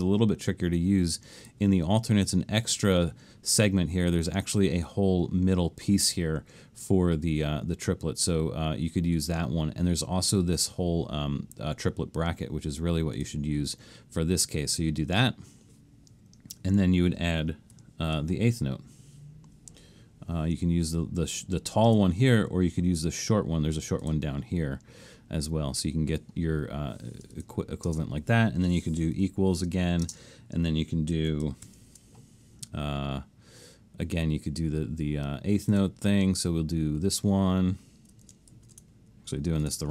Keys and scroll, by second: 17.8 alt+shift+super+s, 27.9 space, 29.2 =, 30.1 space, 31.7 alt+shift+super+s, 38.5 alt+shift+super+s.